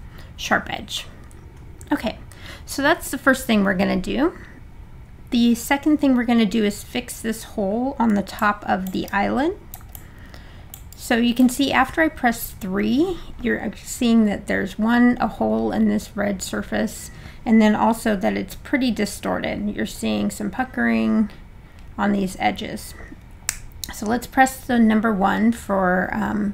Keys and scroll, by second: 23.5 1.